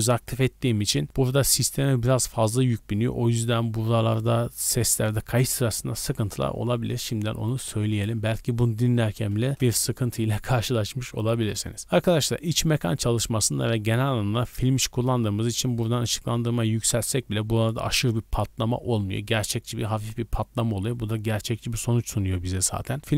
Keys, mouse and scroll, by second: 7.9-9.6 drag.